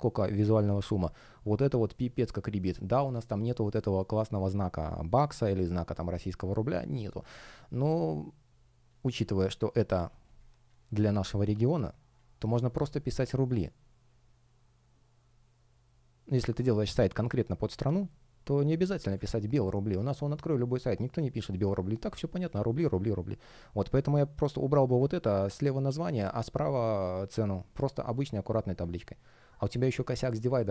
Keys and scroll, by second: 0.6 space, 8.8 space.